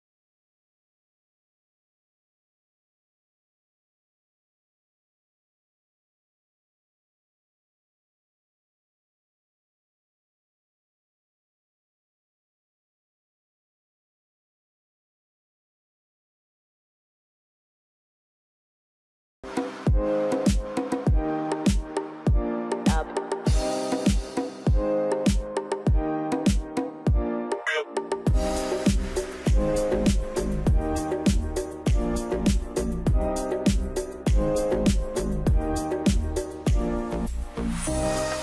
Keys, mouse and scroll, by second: 4.4 middle click, 4.9-6.0 scroll up 1, 6.0 e, 12.3 scroll down 1, 12.8 middle click, 13.6-14.5 scroll down 1, 15.7 shift+click, 18.7 middle click, 36.9 Return, 38.1-38.4 typing, 38.2 Return.